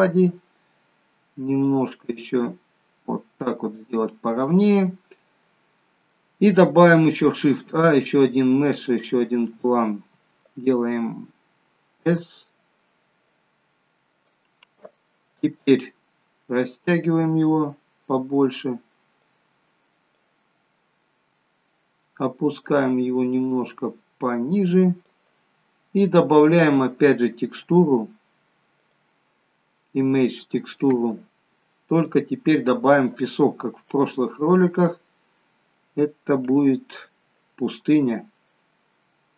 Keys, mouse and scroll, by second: 1.7 click, 4.4 middle click, 7.3 shift+a, 16.9 click, 19.1 click, 20.7 middle click, 22.7 click, 26.5 click, 28.7 click, 31.9 click.